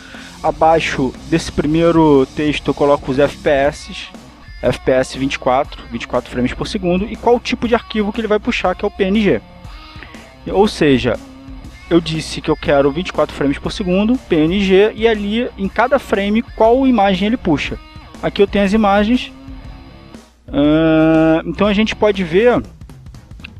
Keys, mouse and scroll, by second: 0.3 click, 1.2 Return, 2.6-5.8 typing, 6.3 Return, 7.3-8.6 typing, 10.1 click, 10.8 click, 17.8 click, 21.2 alt+Tab, 22.9-23.5 drag.